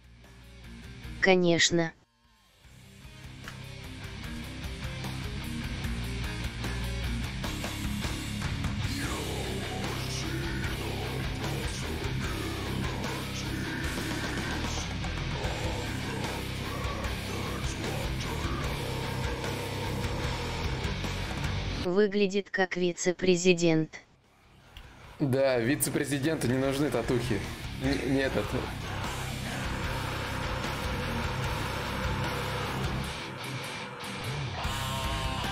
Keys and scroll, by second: 7.9 shift+d, 9.7 d, 16.3 v, 17.9 shift+d, 18.3 shift+d, 20.1 d, 24.3 ctrl+z, 24.3-26.1 typing.